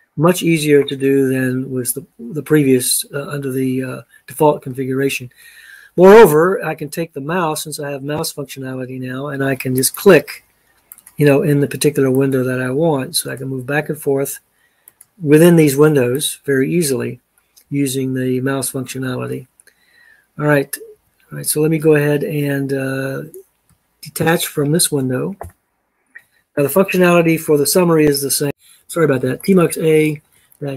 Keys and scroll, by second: 20.8 Escape, 24.1 ctrl+a, 25.3 d, 28.4-30.7 typing.